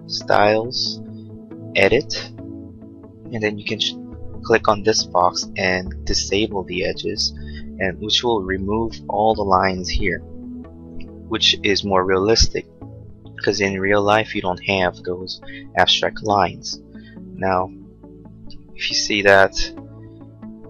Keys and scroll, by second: 19.2 Left, 19.7 Right.